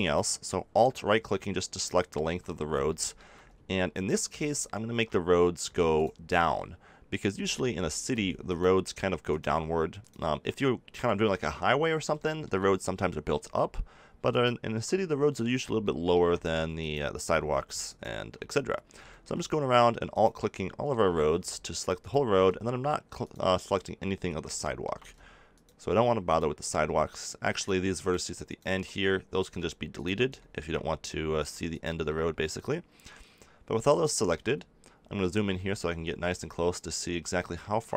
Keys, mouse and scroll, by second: 0.0-1.8 drag, 2.8-5.9 middle drag, 7.4 middle click, 8.4 middle click, 10.0-11.7 right drag, 11.7 middle click, 14.2-15.8 right drag, 15.8-17.8 middle drag, 17.8 right click, 19.0-21.8 middle drag, 21.8 right click, 22.0-23.1 middle drag, 23.1-24.6 right drag, 24.6 middle click, 30.4-32.0 middle drag, 33.2 click, 33.6-35.9 middle drag, 36.4 middle click, 36.8 middle click, 37.7 middle click.